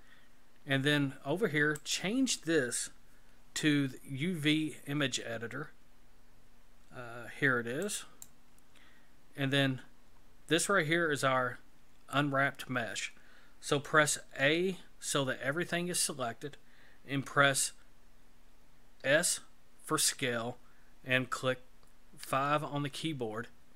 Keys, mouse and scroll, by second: 1.7 click, 9.3-12.2 scroll down 8, 14.4 a, 19.0 s.